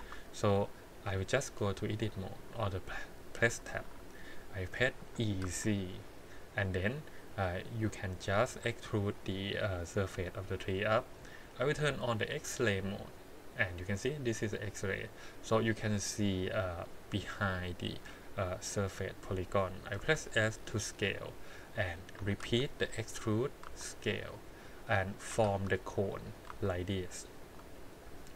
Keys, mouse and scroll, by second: 2.4-3.4 drag, 5.0 e, 12.7 click, 13.9 click, 14.5 click, 20.0 s, 22.2 e, 23.6 s, 25.3 e, 26.5 s, 28.0 click.